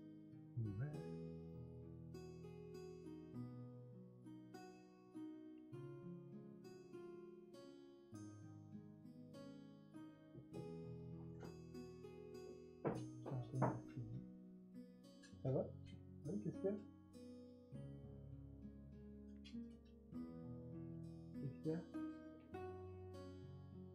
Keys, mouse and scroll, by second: 4.7 ctrl+z, 6.8 ctrl+z.